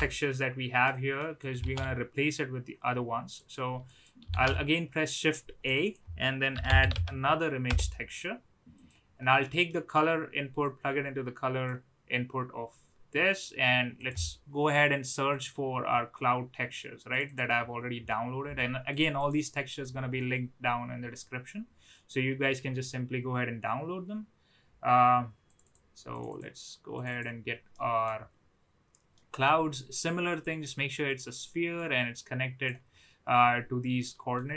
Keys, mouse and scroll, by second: 1.0 middle click, 1.5 click, 1.6 shift+a, 4.4 shift+a, 9.6 middle click, 10.6-11.6 drag, 27.8 middle click, 29.1 middle click, 30.4-31.2 drag, 31.7 click, 34.0 middle click.